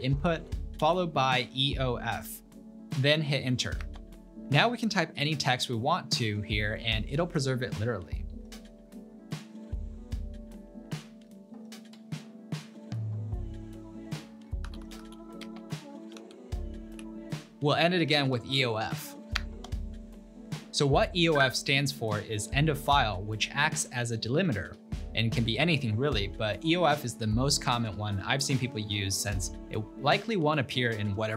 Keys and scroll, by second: 0.4-1.4 typing, 3.8 Return, 8.4-17.1 typing, 14.2 Return, 15.5 Return, 19.4 Return.